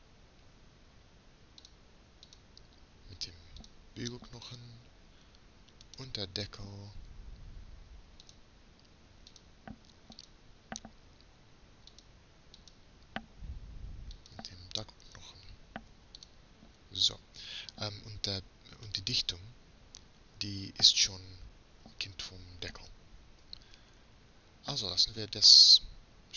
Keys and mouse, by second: 0.3 middle click, 2.5-4.1 drag, 4.6-6.5 drag, 6.5 right click, 7.5 click, 9.4 click, 10.1-12.0 drag, 13.3-14.5 drag, 16.2-18.4 drag, 19.7 right click.